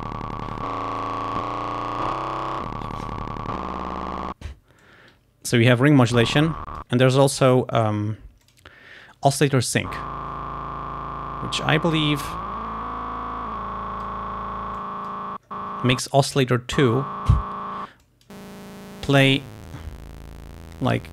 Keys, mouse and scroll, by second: 4.9 click, 6.4 click, 8.5 click, 12.3-14.3 drag, 14.8 click, 18.1 click, 19.4-21.1 drag.